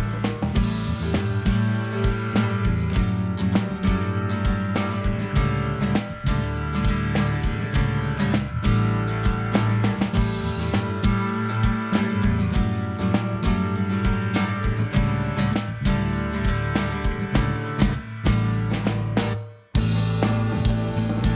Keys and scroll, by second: 1.3 super+=.